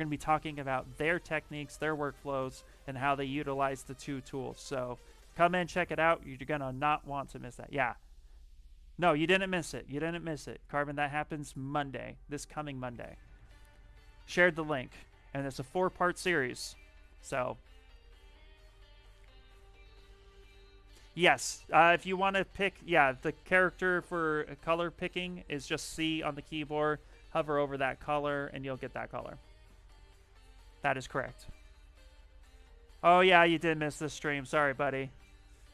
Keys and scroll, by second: 25.0 c, 25.7 c, 26.5 c, 27.2 c, 28.4 c, 29.2 c.